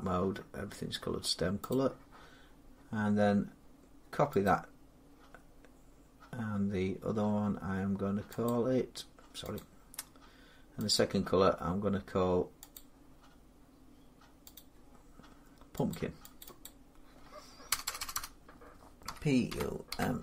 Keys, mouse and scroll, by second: 0.1-1.2 scroll, 1.5 click, 4.3 click, 5.2 middle click, 8.3 click, 9.4 click, 10.8 click, 12.6 click, 14.4 click, 15.7 click, 16.2 click, 16.5 click, 17.5-20.2 typing.